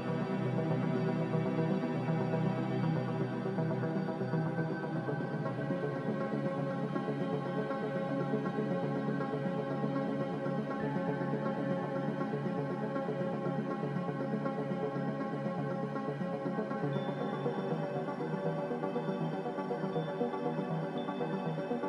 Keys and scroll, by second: 0.3 0, 1.7-3.7 typing, 5.6 f, 15.8 f, 18.4 z, 19.6 m.